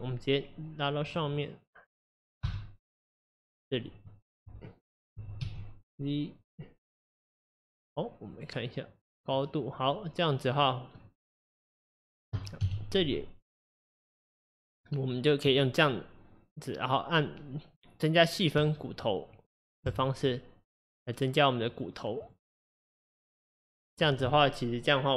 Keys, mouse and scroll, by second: 1.4 click, 2.5 x, 3.5 click, 5.1 g, 8.3 click, 10.6 click, 11.1-12.6 middle drag, 12.6 KP_1, 13.6 click, 15.5 click, 18.6-21.7 right drag, 21.7-25.1 drag.